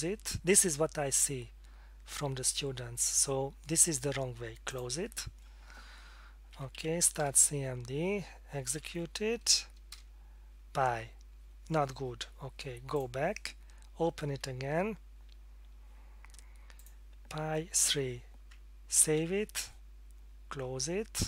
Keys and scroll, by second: 6.5-7.4 typing, 8.4-9.1 typing, 9.9 Return, 14.7 F4, 19.0 ctrl+s.